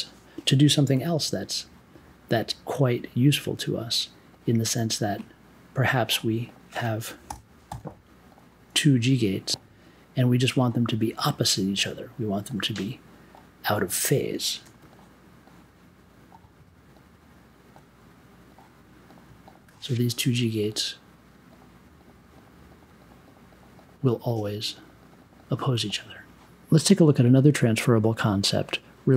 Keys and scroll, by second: 7.3 n, 9.0 g, 14.6 super+j.